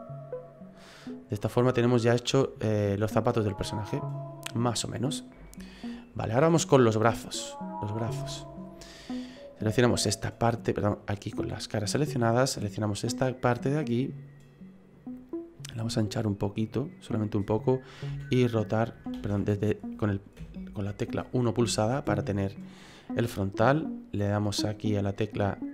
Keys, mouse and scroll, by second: 1.0 middle click, 1.8-4.0 scroll down 3, 2.1 middle click, 4.6 scroll up 1, 4.7-5.4 scroll down 8, 5.4 shift+middle click, 5.8 middle click, 6.6-7.2 scroll up 4, 7.2 middle click, 8.3 shift+middle click, 8.8 middle click, 10.0 right click, 11.7 click, 12.4 right click, 12.9 middle click, 13.8 middle click, 15.6 click, 18.1 r, 19.2 ctrl+z, 20.4 KP_1, 21.3-21.7 scroll up 3, 21.7 shift+middle click.